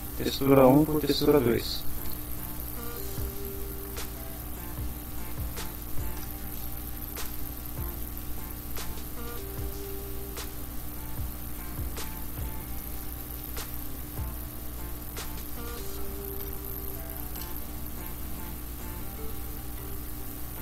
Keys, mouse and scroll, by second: 2.7 Down, 3.4 Up, 4.6-6.3 typing, 6.3 shift+Return, 6.8 shift+Up, 7.0 End, 7.3 Return, 7.7 Tab, 8.0-13.5 typing, 13.9 End, 15.6 Return, 16.5 shift+Return, 17.0 shift+Up, 17.2 shift+End, 17.4 shift+Return, 17.7 shift+Tab, 18.0-20.6 typing.